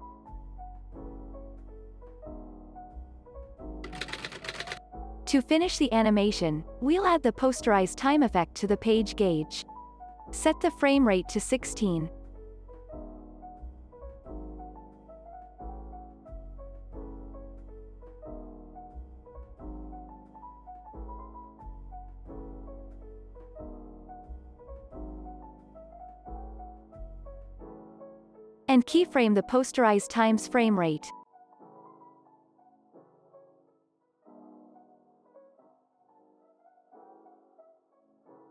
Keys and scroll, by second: 5.2 space, 9.2 Down, 9.7 Return, 11.8 1, 12.2 Return, 14.8 space, 20.4 space, 21.8 ctrl+s, 23.5 u, 25.5 x, 31.2 alt+x, 33.5 2, 33.9 Return, 36.7 u.